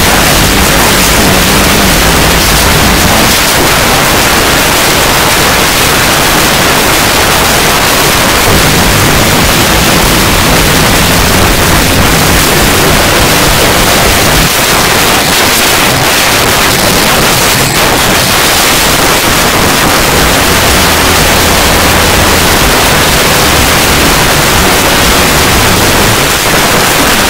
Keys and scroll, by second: 3.3 Page_Down, 14.4 Page_Down, 26.1 Page_Down, 27.0 Page_Down.